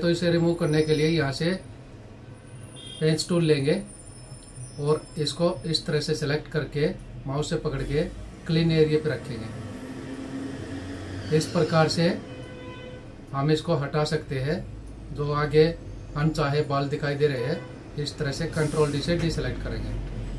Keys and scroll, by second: 18.6 ctrl+d, 19.6 ctrl+-.